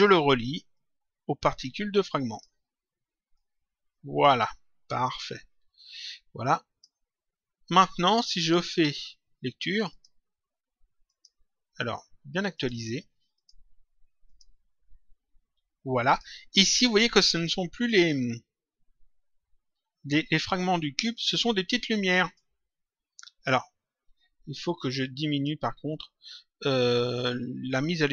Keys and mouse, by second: 0.7 click, 3.3 click, 5.1 click, 8.6 click, 9.9 click, 11.0 click, 12.4 click, 16.0 click, 22.2 click, 25.3 click.